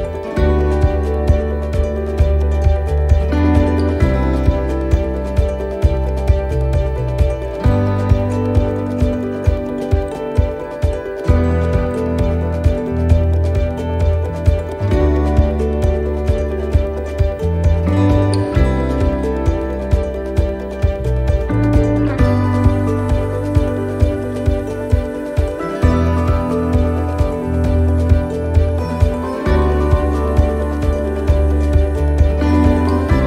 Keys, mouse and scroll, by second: 0.4 shift+right click, 1.5 shift+right click, 1.9-4.8 shift+right click, 4.9 middle click, 5.3-5.8 scroll up 4, 5.8 shift+middle click, 6.7 shift+right click, 7.3 shift+right click, 7.9 shift+right click, 8.4 shift+right click, 8.8 shift+right click, 11.7 shift+right click, 11.9 middle click, 14.0-14.5 scroll down 3, 14.5 shift+middle click, 14.9 shift+scroll down 1, 15.1 middle click, 18.7 click, 20.8 a, 22.0 click, 25.1 middle click, 29.3 ctrl+z, 30.8 click, 32.7 shift+right click.